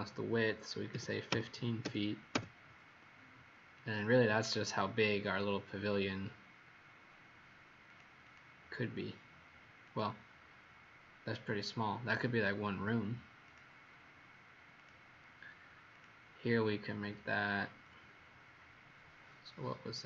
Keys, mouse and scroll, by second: 0.9 KP_1, 1.2 KP_5, 1.8 ', 2.3 Return, 4.4 click, 5.9-6.3 scroll up 3, 6.9 scroll up 2, 7.9 click, 8.2 click, 9.9 click, 12.0 Escape, 13.5 click.